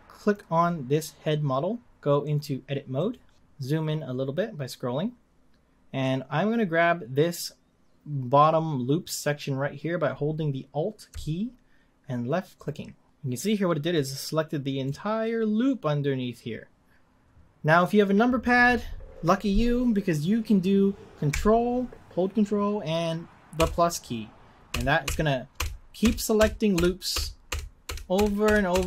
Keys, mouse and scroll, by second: 0.1 click, 2.2-3.7 drag, 3.7-7.4 scroll up 3, 12.5 alt+click, 14.9-17.8 middle drag, 23.6 ctrl+KP_Add, 24.7 ctrl+KP_Add, 25.0 ctrl+KP_Add, 25.5 ctrl+KP_Add, 26.0 ctrl+KP_Add, 26.3 ctrl+KP_Add, 26.7 ctrl+KP_Add, 27.1 ctrl+KP_Add, 27.5 ctrl+KP_Add, 27.8 ctrl+KP_Add, 28.1 ctrl+KP_Add, 28.4 ctrl+KP_Add, 28.7 ctrl+KP_Add.